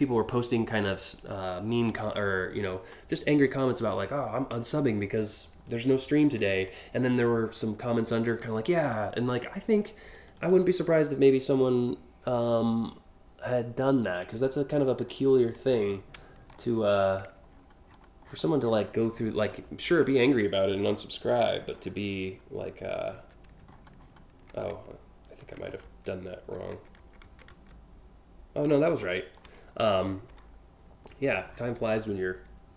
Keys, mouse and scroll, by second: 3.4 scroll down 2, 4.1-4.5 scroll down 3, 4.8 scroll up 2, 6.0 click, 11.2-13.8 drag, 14.7 click, 15.4 scroll down 1, 16.1 alt+scroll down 1, 17.2 ctrl+scroll up 1, 19.7 scroll up 1, 21.4-21.9 alt+scroll up 2, 23.3-24.1 ctrl+scroll up 5, 25.0 ctrl+z, 25.5 ctrl+alt+z, 25.9 ctrl+alt+z, 26.3 ctrl+alt+z, 26.6 ctrl+alt+z, 26.8 ctrl+alt+z, 27.1 ctrl+alt+z, 28.6-29.7 scroll down 6, 30.0 scroll up 4, 30.8 scroll up 1, 31.1 scroll down 1.